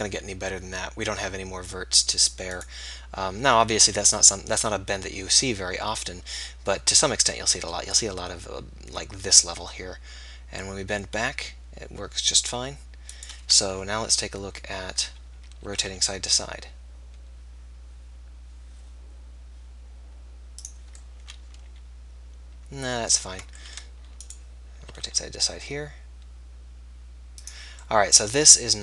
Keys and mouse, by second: 1.5-4.2 drag, 3.9 KP_3, 4.5 r, 14.0 KP_3, 14.4 KP_1, 15.6 r, 22.4 middle click, 23.2 ctrl+z, 25.0-26.4 middle drag, 25.0 r, 27.4 middle click, 28.0-28.8 drag.